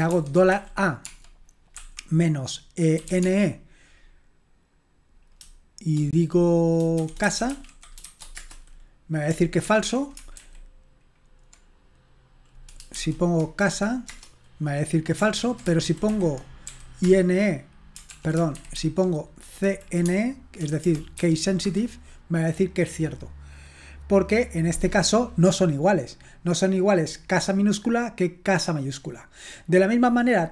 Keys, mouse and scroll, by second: 0.1-3.5 typing, 7.0-8.5 typing, 9.6 ctrl+p, 10.4 alt+b, 13.4 Delete, 14.1 Return, 15.4 ctrl+p, 15.9 alt+b, 16.1 alt+b, 16.7 i, 17.0 Return, 18.1 ctrl+p, 18.6 alt+b, 18.7 alt+b, 19.7 Delete, 20.0 typing, 21.1-21.9 typing.